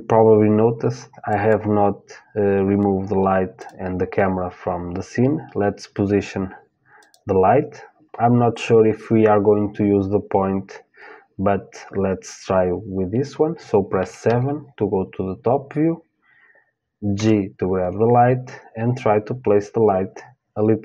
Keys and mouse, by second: 0.9-2.9 drag, 3.2-9.1 drag, 13.9 KP_7, 16.8 g.